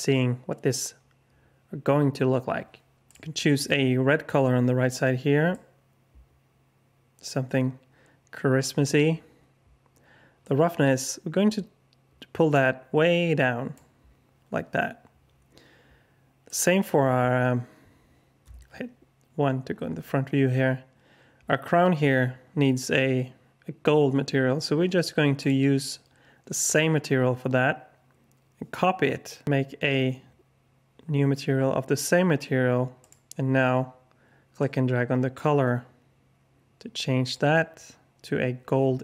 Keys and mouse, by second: 3.0 click, 10.5-13.7 drag, 18.5 KP_1, 25.5-26.7 drag.